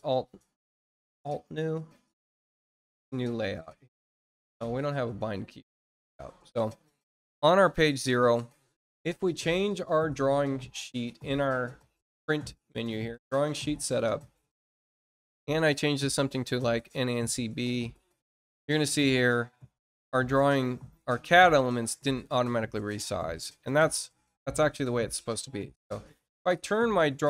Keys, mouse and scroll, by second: 1.9 click, 4.1 click, 8.1 click, 11.0 click, 12.9 click, 15.1 click, 15.9 click, 17.1 click, 18.1-18.4 scroll down 2, 20.4 click, 21.7 scroll down 1, 22.2 middle click, 23.3 scroll up 1, 26.8 click.